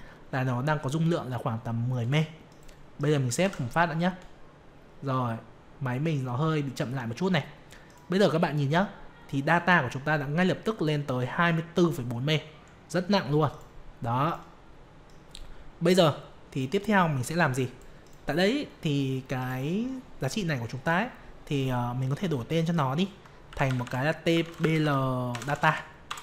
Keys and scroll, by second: 3.4 ctrl+s.